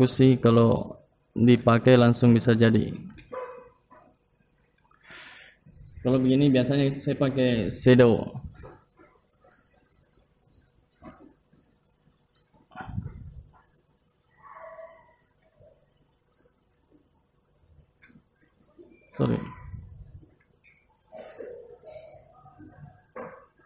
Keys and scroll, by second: 12.2 ctrl+z, 18.7 ctrl+z, 20.7 ctrl+Home.